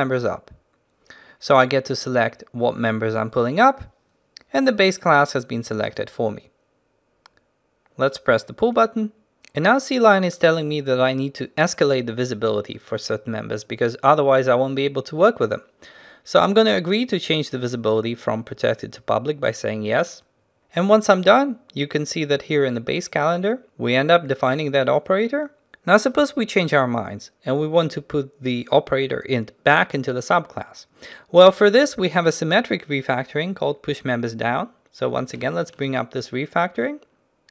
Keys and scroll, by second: 36.0 ctrl+alt+shift+t.